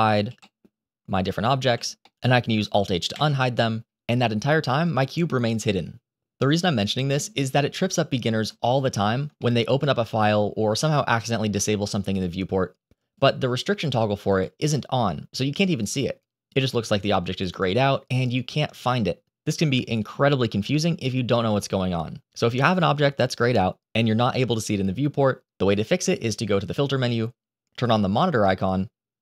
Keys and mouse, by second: 0.1 h, 0.3 middle click, 1.5 h, 1.9 middle click, 3.0 alt+h, 8.5 shift+middle drag, 9.3 shift+middle click, 13.0-14.7 drag, 18.7 click, 26.7-29.2 drag.